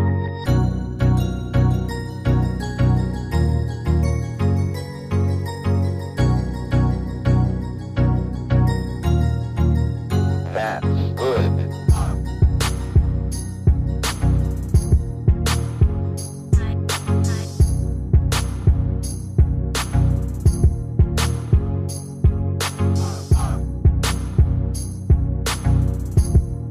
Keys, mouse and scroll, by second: 11.6 Caps_Lock, 12.5 b, 14.3 typing, 20.3-22.2 typing, 22.3 Return.